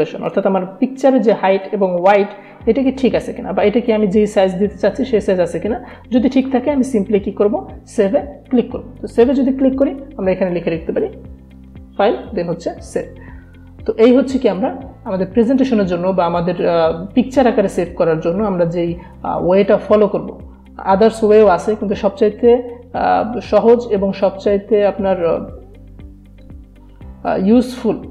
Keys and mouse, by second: 9.3 click, 11.0-12.2 typing.